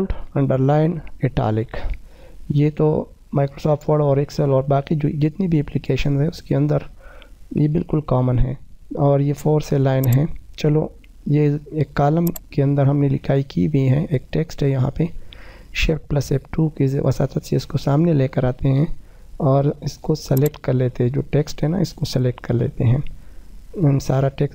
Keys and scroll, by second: 15.2 shift+F2.